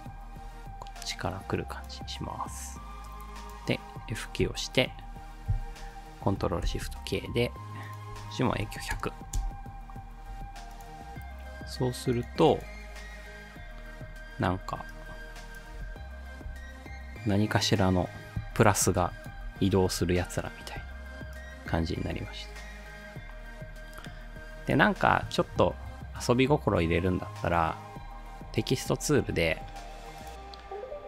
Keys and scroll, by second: 4.4 F9, 6.6 ctrl+shift+k, 8.3-9.4 typing, 10.4 space, 15.7 space, 19.4 space, 20.7 space.